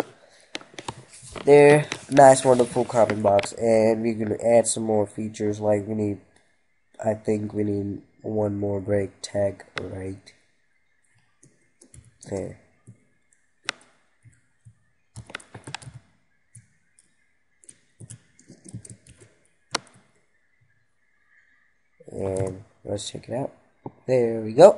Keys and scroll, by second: 19.3 ctrl+s.